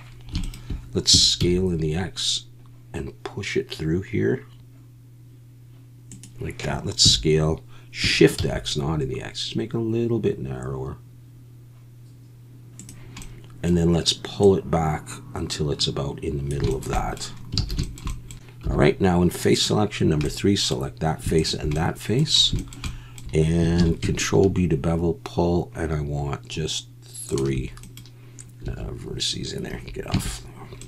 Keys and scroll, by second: 1.4 x, 7.0 s, 8.4 shift+x, 17.7 alt+a, 18.6 3, 23.8 ctrl+b, 28.6 Escape, 29.7 Escape, 30.1 Tab.